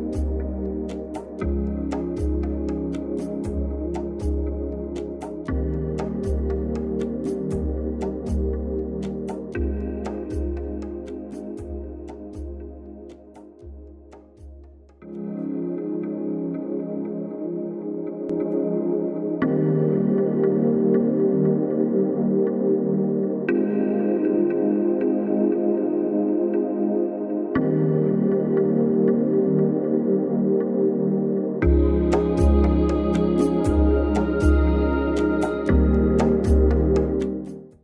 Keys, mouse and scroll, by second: 0.9 click, 8.6 ctrl+-, 9.8 =, 12.3 ctrl+=, 12.8 alt+click, 17.0 click.